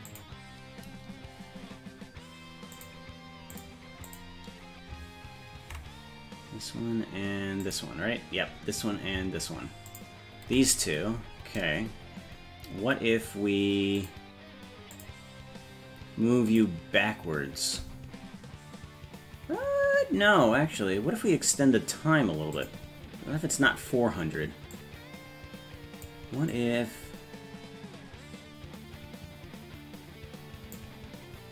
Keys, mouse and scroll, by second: 0.1 click, 2.8 click, 3.6 click, 4.1 click, 7.6 click, 9.9 ctrl+click, 14.0 click, 15.0 click, 16.5 click, 22.6 click, 24.8-26.1 drag, 26.5-30.8 drag.